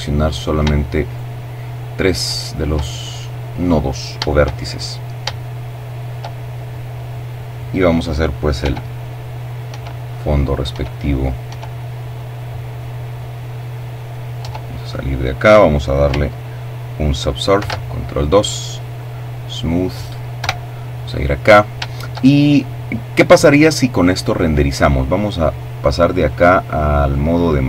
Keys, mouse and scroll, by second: 0.8 right click, 1.6 middle click, 2.4-3.0 scroll down 1, 3.1-4.2 shift+middle drag, 4.9 shift+middle click, 7.2 e, 8.0 click, 8.2 e, 9.0 click, 9.3 e, 9.8 click, 10.0 e, 10.7 click, 11.8-13.2 middle drag, 13.0 Tab, 13.4-13.9 scroll down 1, 13.9 middle click, 16.1 ctrl+2, 17.6 click, 19.0 KP_0, 20.0-20.6 scroll up 1, 20.9-21.4 shift+scroll down 3, 24.1 click, 25.1 click.